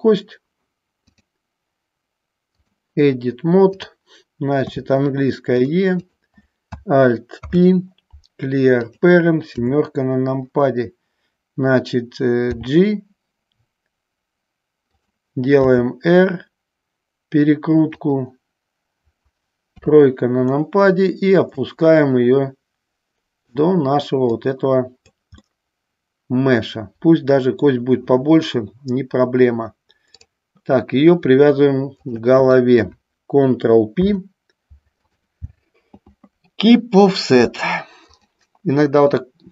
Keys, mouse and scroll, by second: 1.2-2.9 drag, 3.8 click, 5.8 click, 6.2 click, 7.5 alt+p, 9.6 KP_7, 12.6 g, 15.1 click, 15.9 r, 18.1 click, 19.9 KP_3, 21.7-23.6 drag, 24.5 click, 25.6-27.8 middle drag, 30.3 click, 32.1 shift+click, 34.2 ctrl+p, 38.2-39.3 drag.